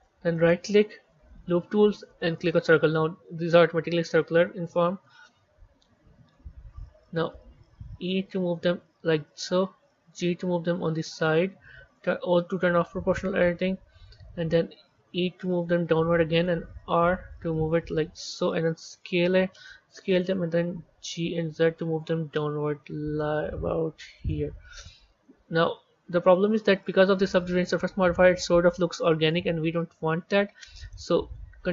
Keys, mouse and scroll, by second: 0.2-4.6 right drag, 4.6 KP_1, 5.4-7.6 scroll down 2, 25.7 Tab, 26.5-29.6 middle drag, 30.1 b, 30.8-31.7 middle drag.